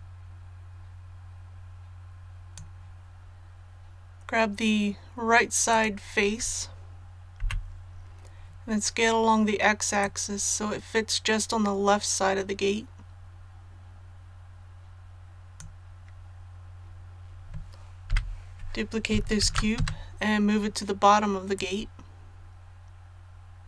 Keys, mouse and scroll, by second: 5.7 right click, 7.4 KP_1, 10.0-16.4 drag, 19.4 shift+d, 21.6-23.6 drag.